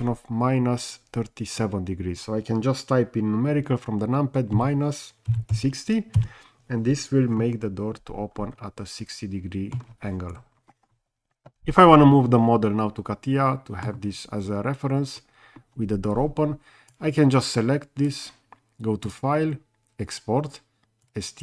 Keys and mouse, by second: 4.5 KP_Subtract, 5.3 KP_6, 5.5 KP_0, 6.2 KP_Enter, 7.4-9.7 middle drag, 12.3-13.8 middle drag, 16.9-18.1 drag, 19.1-21.2 drag.